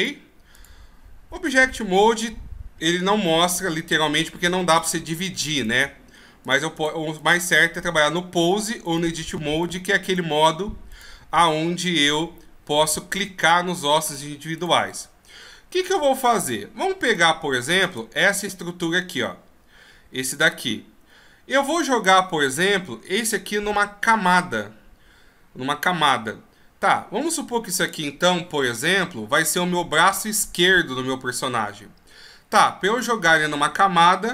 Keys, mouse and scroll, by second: 0.1 click, 4.8 right click, 5.3 right click, 5.7 right click, 6.6 click, 6.9 click, 7.3 click, 9.0 right click, 9.8 right click, 10.2 right click, 11.1 right click, 13.5 right click, 14.2 right click, 14.7 right click, 16.5 shift+right click, 17.2-18.0 shift+right click, 17.8 shift+right click.